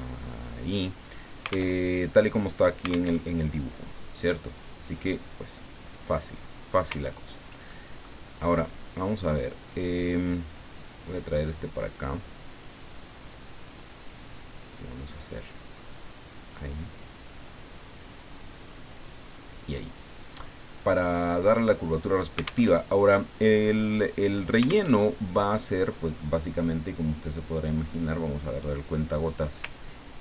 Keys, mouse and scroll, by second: 1.7 alt+Tab, 3.2 alt+Tab, 4.9 click, 7.0-7.4 ctrl+scroll up 2, 7.7 ctrl+click, 9.0 click, 10.9-13.1 drag, 14.2-16.6 drag, 17.1-20.0 drag, 22.7 alt+Tab, 24.9 alt+Tab, 28.3 click.